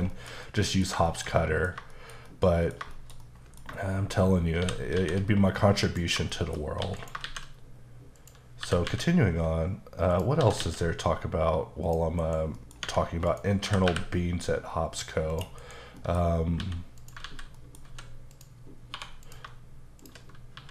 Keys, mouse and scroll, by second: 0.1 shift+middle click, 1.1 shift+middle click, 1.9 shift+middle click, 2.9 shift+middle click, 4.6 shift+c, 5.2 a, 5.9 click, 6.3 shift+middle click, 6.8 x, 7.0 click, 7.3 shift+a, 8.2 click, 8.6 typing, 10.1 click, 10.4 typing, 11.9 click, 12.2 KP_Decimal, 12.6 middle click, 12.8 Tab, 13.3 click, 13.7 typing, 15.3 click, 15.6 KP_Decimal, 16.0 middle click, 16.6 x, 17.0 click, 17.3 alt+z, 17.6 middle click, 17.9 a, 18.3 click, 18.9 1, 19.3 click, 20.1 shift+click, 20.6 z.